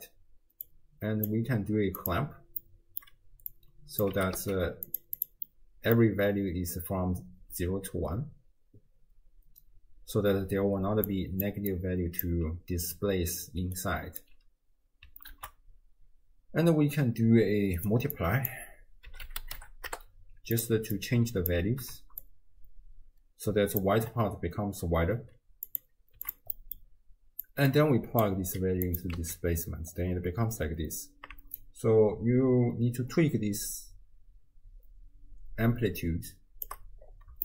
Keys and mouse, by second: 0.7-1.4 drag, 2.1-2.7 drag, 2.7 middle click, 3.5-4.1 drag, 4.1 g, 5.2 click, 5.5 middle click, 10.9-12.4 typing, 11.7 click, 13.7 d, 13.8 right click, 14.2 d, 14.3 d, 15.4 ctrl+a, 18.2-20.7 drag, 21.0-21.6 alt+drag, 22.2-23.8 shift+drag, 25.7 click, 26.6 middle click, 27.5-28.3 drag, 28.9 click, 29.2 x, 31.6-36.7 shift+drag.